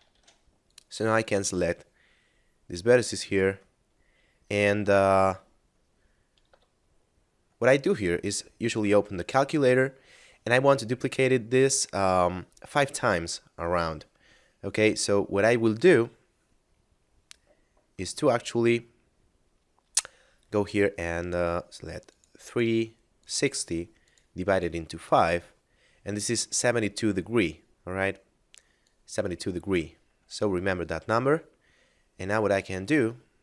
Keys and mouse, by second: 0.0 ctrl+Tab, 0.7 click, 1.2 ctrl+click, 3.8 middle click, 8.0 click, 22.1 click, 28.8 click, 30.4 middle click, 32.7 shift+space, 33.2 middle click.